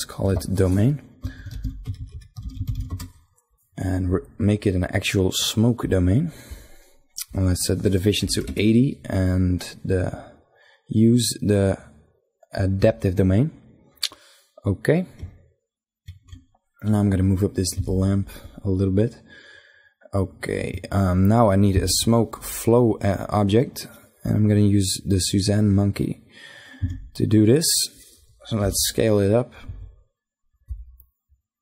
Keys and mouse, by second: 0.7 shift+d, 1.1 BackSpace, 2.1 BackSpace, 4.1-8.1 drag, 10.5-14.5 drag, 14.5 middle click, 17.3-19.2 right drag, 17.7 g, 21.7 shift+a, 25.9-27.6 drag, 26.8 s, 27.8 ,, 29.6 s, 30.9-31.6 drag.